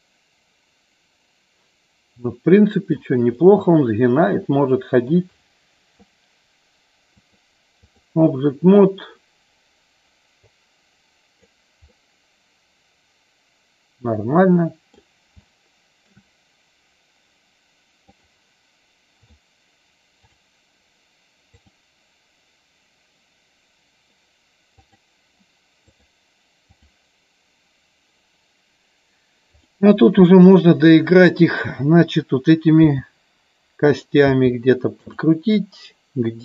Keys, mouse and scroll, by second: 0.0-3.0 middle drag, 3.5-5.1 middle drag, 7.4 click, 10.6 click, 12.0-15.0 middle drag, 15.5 shift+middle click, 18.2 click, 19.5 click, 20.2 click, 21.8-24.2 drag, 24.9 click, 26.0 click, 29.6 click, 31.3 click, 34.0 click, 35.1 click.